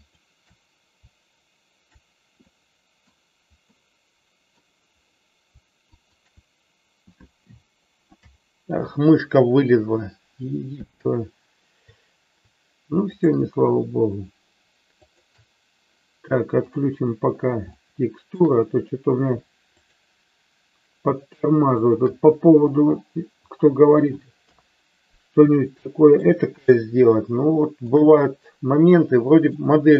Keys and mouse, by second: 3.0 middle click, 3.8-4.8 middle drag, 5.9-7.3 shift+drag, 13.1-14.6 shift+drag, 15.1-16.6 shift+drag, 16.7 click, 17.8 shift+middle click, 19.8-21.3 shift+drag, 21.6-23.0 shift+drag, 24.4 KP_3, 25.8 middle click, 26.8-27.9 middle drag, 28.9 middle click.